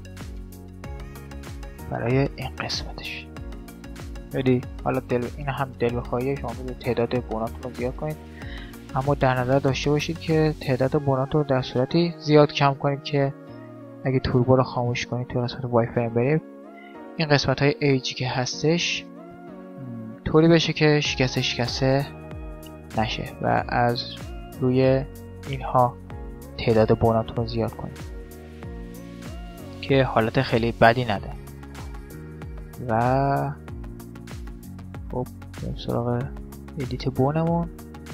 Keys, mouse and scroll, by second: 3.4 click, 3.4-5.1 right drag, 4.4 g, 5.6 middle click, 6.5-7.6 middle drag, 6.8 g, 7.6 right click, 7.7 middle click, 8.2 right click, 8.6 middle click, 9.8 middle click, 10.0 click, 10.0 middle click, 10.3 middle click, 10.4 Tab, 11.4-13.2 right drag, 12.6-16.0 drag, 14.8 z, 15.4-18.2 middle drag, 18.6-23.4 middle drag, 24.2-26.0 middle drag, 26.2-33.4 middle drag, 33.7-35.4 drag, 34.2 Tab, 35.6-37.0 right drag, 35.8 Tab, 36.8 click, 37.6-38.1 middle drag, 38.0 z.